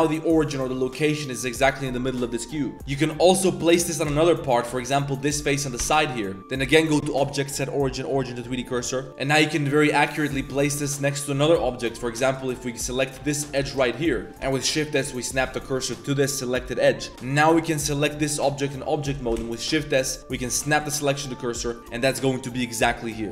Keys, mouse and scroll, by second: 0.0 g, 2.7 Tab, 2.8 click, 3.2 3, 3.4 click, 4.1 shift+s, 5.8 Tab, 6.6-8.2 drag, 8.6 click, 8.9 shift+middle click, 9.1 g, 10.9 click, 11.7 shift+middle click, 12.2 middle drag, 12.4 shift+middle click, 12.8 Tab, 13.1 2, 13.2 click, 13.6 shift+s, 14.4 shift+s, 17.1 Tab, 17.5 click, 19.3 shift+s, 21.5 shift+drag, 21.9 s.